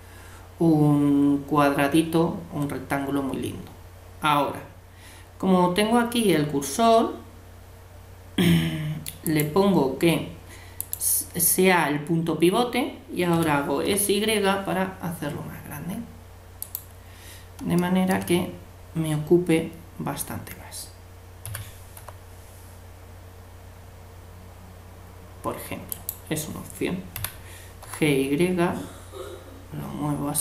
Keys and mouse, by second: 9.2-11.1 drag, 13.3 s, 18.5-21.4 middle drag, 21.4 s, 27.2 g.